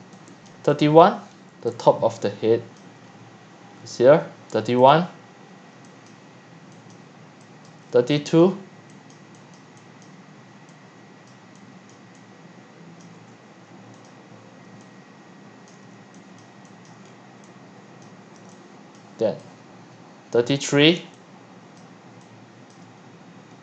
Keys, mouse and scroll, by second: 0.0-3.8 typing, 0.5 click, 1.0 click, 1.2 middle click, 1.5 scroll up 6, 3.0 middle click, 3.1 click, 3.3 click, 3.5 click, 4.9 click, 5.2-13.2 typing, 6.1 click, 6.9 click, 7.7 click, 8.4 click, 9.6 click, 10.1 click, 14.1 drag, 14.7-22.6 typing, 16.9 click, 17.0-17.4 scroll down 3, 18.1 click, 19.0 click, 20.7 click, 21.8 drag, 22.7 drag, 23.0 scroll up 1, 23.1 middle click.